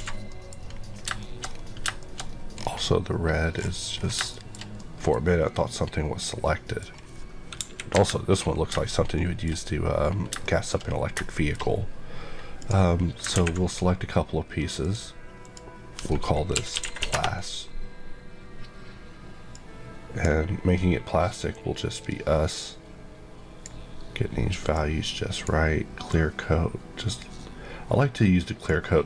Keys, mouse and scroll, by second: 0.2 middle click, 1.0 scroll down 2, 1.1 shift+middle click, 1.4-2.5 shift+scroll up 5, 2.0 shift+middle click, 3.5 scroll, 3.6 scroll down 1, 4.1 shift+scroll down 1, 4.3 shift+middle click, 4.7 middle click, 5.4 middle click, 6.9 scroll down 1, 7.6 KP_1, 7.9 KP_3, 9.1 shift+middle click, 9.5-12.5 shift+scroll up 6, 10.4 shift+middle click, 11.2 shift+middle click, 12.5 click, 14.7 click, 15.4 click, 16.5-17.0 typing, 17.1 Return, 19.5 click.